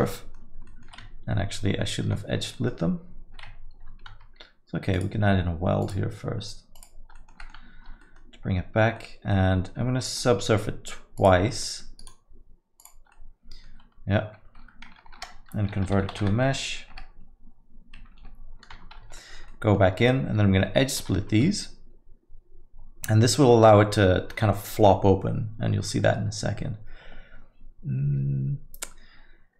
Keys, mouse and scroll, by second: 0.1 alt+middle click, 0.7 alt+middle click, 1.7 Tab, 2.1 Tab, 2.5 alt+middle click, 4.1 Tab, 4.9 click, 6.7 click, 7.3 alt+middle click, 7.4 middle click, 7.7 Tab, 8.0 alt+middle click, 8.9 alt+middle click, 10.0 middle click, 11.1 click, 11.5 alt+middle click, 12.0 right click, 13.1 alt+middle click, 15.0 F3, 18.7 Tab, 19.2 alt+middle click, 19.4 alt+middle click, 21.0 ctrl+e.